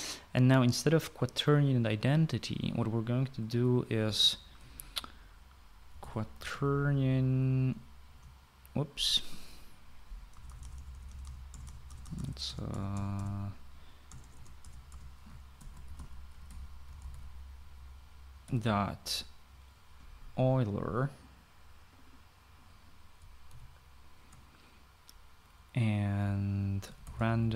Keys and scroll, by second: 5.5-7.8 typing, 8.9 Return, 11.2-19.2 typing, 24.1-24.8 typing, 27.4-27.5 typing.